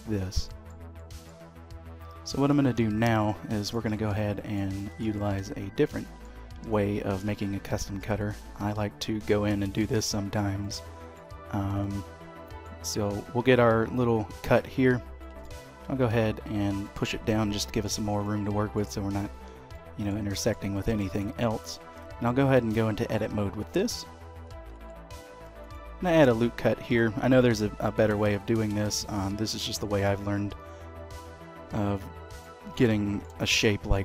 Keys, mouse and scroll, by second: 0.1-0.4 scroll up 2, 0.4 middle click, 0.9 shift+middle click, 2.5 d, 4.1 middle click, 4.1-4.5 scroll up 1, 4.7 shift+middle click, 5.1 scroll down 3, 5.7 scroll up 2, 6.1 shift+middle click, 8.1 click, 10.9 middle click, 12.1 shift+middle click, 15.2 shift+middle click, 15.6 g, 17.1 middle click, 19.4-20.3 scroll up 3, 19.7 middle click, 20.3 shift+middle click, 20.7 middle click, 21.2 shift+middle click, 21.7 Tab, 24.7 ctrl+r, 27.3 click, 28.2 alt+click, 29.3 s, 32.7 middle click, 33.4 shift+middle click.